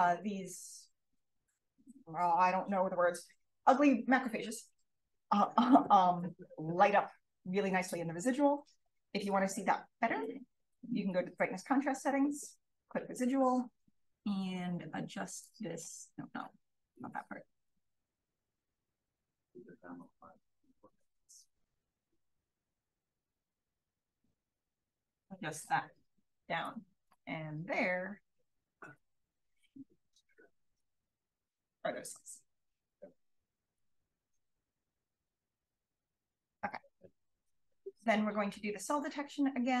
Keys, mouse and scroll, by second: 9.2 click, 15.3 click, 17.8 click, 18.0 click, 19.2 click, 20.6 click, 22.1-23.1 drag, 22.4 1, 23.7-25.5 drag, 27.3 click, 28.9 3, 29.6 click, 30.7 1, 34.6 click, 35.0-36.0 scroll down 1, 35.0 BackSpace, 36.0 click, 36.0-37.6 scroll down 1, 37.6-39.8 scroll down 1.